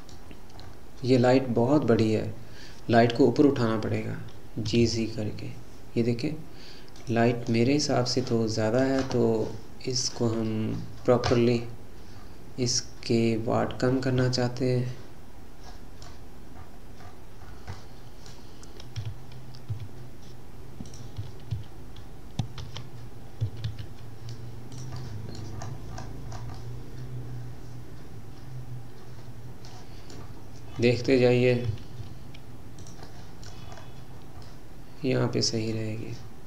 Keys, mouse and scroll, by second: 0.3-3.5 scroll down 6, 4.8 g, 11.5-12.2 scroll up 3, 12.2-13.3 scroll up 5, 13.3-14.2 scroll down 6, 14.3-16.6 middle drag, 16.6-17.0 scroll up 4, 17.0-17.8 scroll down 7, 17.8-19.0 middle drag, 19.0 g, 21.2 y, 21.5 z, 23.5 g, 25.0-25.6 middle drag, 25.6-26.6 scroll up 12, 26.6-29.8 middle drag, 30.2-31.7 scroll down 9, 31.7 g, 33.0-33.7 middle drag, 33.7-34.5 scroll up 8, 34.5-35.7 middle drag, 35.7-36.4 scroll down 2.